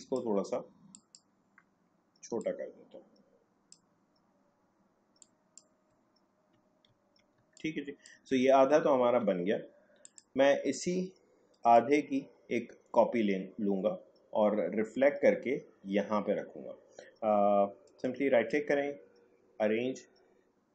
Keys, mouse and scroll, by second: 6.1-6.5 alt+scroll down 1, 6.9 alt+scroll down 1, 7.4 space, 7.5 click, 7.9 space, 8.5 alt+scroll down 1, 10.0-14.3 drag, 17.8 right click.